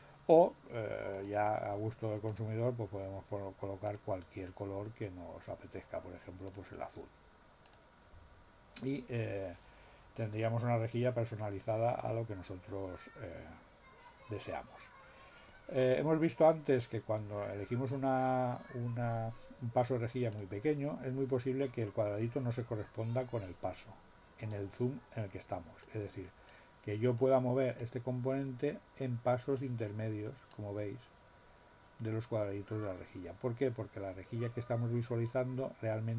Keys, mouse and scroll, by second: 1.1 click, 2.3 click, 3.8 click, 6.4 click, 7.6 click, 16.4 click, 20.3 click, 25.8-27.3 drag, 27.7-36.1 drag.